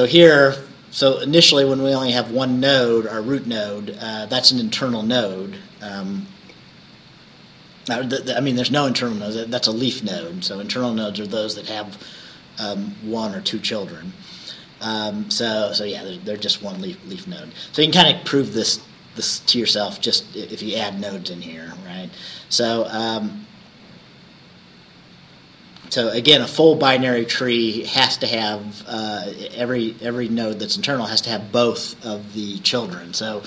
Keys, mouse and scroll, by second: 16.7 Right.